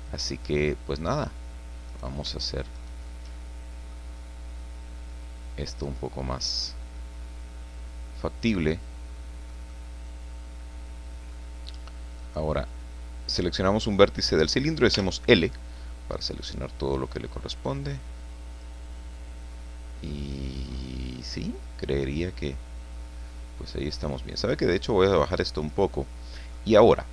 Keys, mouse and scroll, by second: 1.9 right click, 2.7 shift+right click, 3.3 shift+middle click, 5.1-6.8 drag, 5.9 middle click, 7.0-8.4 middle drag, 8.4-11.5 drag, 12.2 right click, 14.9 l, 16.2-18.8 drag, 18.9-24.2 middle drag, 24.7-25.9 drag, 25.9 middle click, 26.8-27.1 scroll up 1.